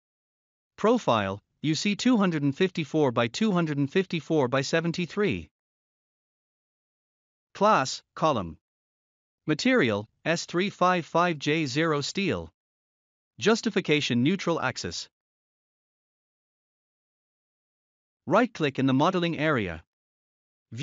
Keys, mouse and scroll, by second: 0.0 click, 1.9 click, 2.6-4.2 scroll down 1, 5.2 click, 7.8 click, 8.3-9.4 scroll up 1, 9.5 click, 11.0 click, 11.5-12.4 scroll up 1, 12.4 click, 14.0 click, 16.7 click, 19.6 right click.